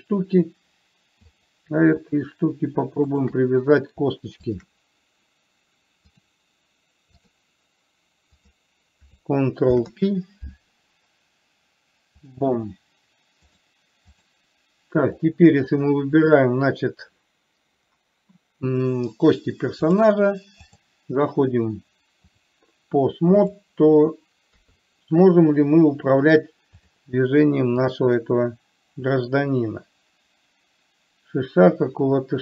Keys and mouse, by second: 1.7 click, 4.9 shift+click, 6.5-7.6 drag, 8.7 click, 10.0 ctrl+p, 13.9-14.6 drag, 15.5 click, 20.2-21.2 drag, 22.6-23.9 drag, 24.9 KP_3, 27.1 click, 28.2-32.4 drag.